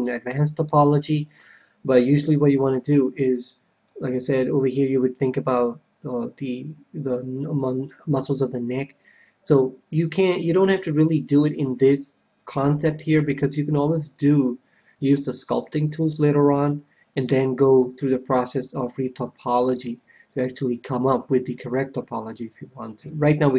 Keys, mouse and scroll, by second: 4.1 KP_3, 23.0 KP_1.